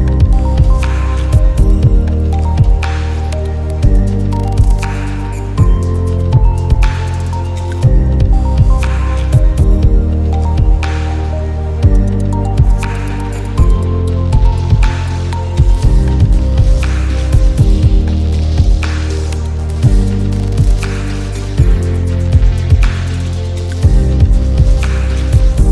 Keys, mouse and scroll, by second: 2.1-9.4 shift+drag, 9.0-9.4 drag, 12.0 space, 12.3 click, 12.4 space, 12.7 space, 14.0 alt+scroll down 1, 15.3-17.3 drag, 18.7 click, 22.7 click, 23.3 i, 23.4 click, 23.9 i, 24.2 click, 24.8 shift+click, 25.0 i, 25.2 click.